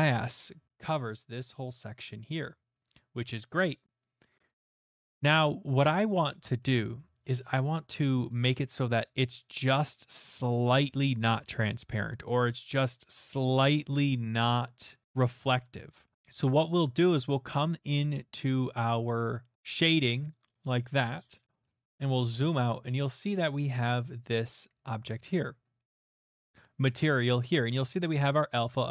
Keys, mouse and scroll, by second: 1.3-2.0 scroll, 4.7 middle click, 5.8 click, 6.6 middle click, 7.2 shift+middle click, 7.7 middle click, 7.9 middle click, 8.4 shift+middle click, 19.5 click, 20.5 click, 21.6-23.3 scroll, 24.0-25.3 scroll, 27.0 middle click.